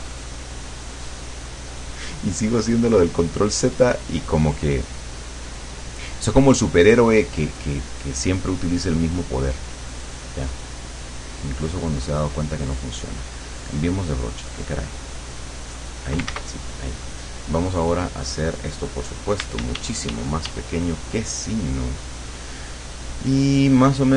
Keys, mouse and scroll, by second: 0.4-1.5 drag, 2.0 click, 2.6 click, 3.6 click, 4.7 click, 11.4-12.5 drag, 13.3 click, 14.9 click, 15.6 click, 16.4 ctrl+z, 18.8 click, 19.4 d, 22.2 click, 24.0 click.